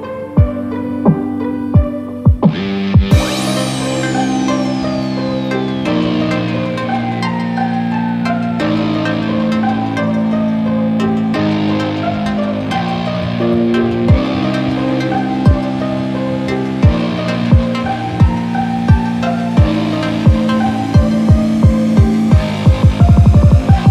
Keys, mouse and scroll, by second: 1.1 s, 3.3-3.6 scroll up 4, 3.5 middle click, 4.3 click, 9.8-11.5 scroll down 1, 11.5 middle click, 13.0 KP_7, 13.7 scroll down 1, 14.1 middle click, 16.6 g, 18.5 scroll up 1, 18.7 middle click, 19.1 scroll down 2, 19.2 shift+middle click, 19.6 middle click, 20.3 s, 21.9 middle click, 22.8-23.2 scroll up 5, 23.2 shift+middle click, 23.6 middle click.